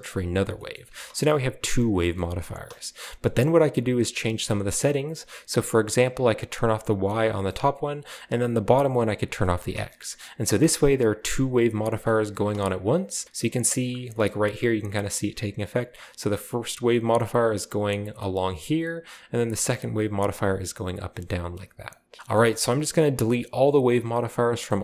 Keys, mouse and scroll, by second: 0.1 click, 0.4 scroll down 2, 0.5-1.6 shift+middle drag, 0.8 space, 1.6-2.7 scroll down 2, 2.1-3.0 shift+middle drag, 2.4 space, 3.2-4.5 middle drag, 3.4-4.5 scroll up 1, 6.9-7.9 drag, 9.0 click, 9.3 scroll down 1, 9.4 middle click, 9.7 space, 10.1-10.7 scroll up 1, 10.7 scroll up 1, 12.0 middle click, 12.3 space, 12.7-14.2 drag, 14.2-14.8 scroll up 1, 14.2 typing, 17.0-17.9 drag, 19.4-20.2 drag, 21.9 click, 22.2 ctrl+b, 22.2-23.3 scroll down 1, 22.2 space, 22.4 shift+middle click, 23.3 click.